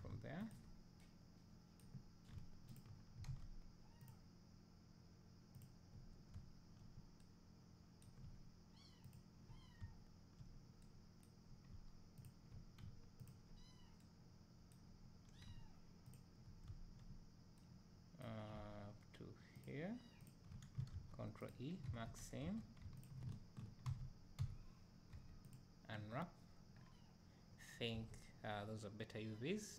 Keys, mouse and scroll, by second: 0.5 ctrl+click, 2.7 ctrl+click, 3.3 ctrl+z, 5.6 ctrl+click, 6.4 `, 9.1 ctrl+click, 9.8 `, 12.2 ctrl+click, 16.1 ctrl+click, 16.7 `, 19.6 ctrl+click, 21.5 ctrl+e, 21.9 alt+a, 22.4 2, 23.0 alt+click, 23.9 alt+a, 24.4 a, 27.9 Tab.